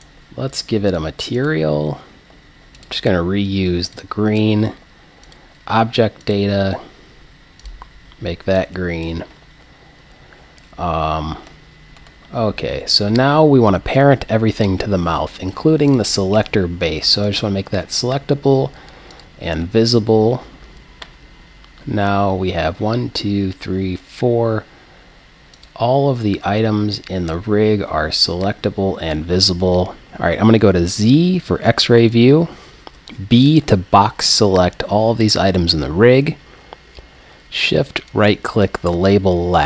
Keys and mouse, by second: 0.0-1.9 right drag, 1.4-12.5 drag, 12.5-16.0 middle drag, 16.0-22.6 drag, 25.6-27.5 drag, 31.1 z, 32.8 b, 33.1 click, 38.1 right click.